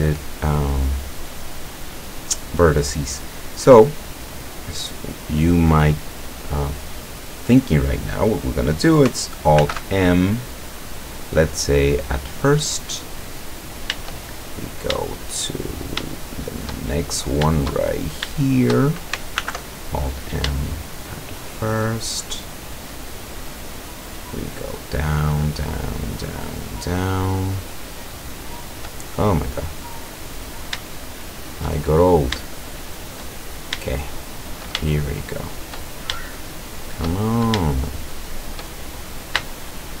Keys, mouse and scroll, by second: 9.6 alt+m, 11.9 click, 13.1-13.6 scroll down 2, 14.4-14.9 shift+scroll up 3, 15.1 shift+click, 15.1-16.0 shift+middle drag, 15.6-16.0 shift+scroll up 2, 16.1-16.9 shift+middle drag, 16.9-17.4 shift+scroll up 1, 18.1-18.7 shift+right drag, 19.4 alt+m, 20.1 alt+click, 20.4-21.3 shift+middle drag, 21.9 shift+middle click, 22.3-22.9 shift+middle drag, 23.0 shift+scroll up 1, 23.0-23.6 shift+middle drag, 23.7-24.2 shift+middle drag, 24.2 shift+scroll up 1, 24.4 shift+click, 25.2 shift+click, 25.8 shift+click, 26.4 shift+click, 27.1 shift+click, 27.7 shift+click, 28.4-28.9 shift+middle drag, 29.2-29.9 shift+scroll down 2, 30.2-30.7 scroll down 1, 31.0-31.7 shift+middle drag, 31.9-32.5 shift+scroll up 1, 32.5-33.3 shift+middle drag, 33.5-34.6 shift+scroll up 3, 33.9-34.6 shift+middle drag, 35.0 shift+click, 35.6 shift+click, 36.2 shift+click, 37.0 shift+click, 37.8 shift+click, 38.5 shift+click, 39.5-40.0 shift+drag.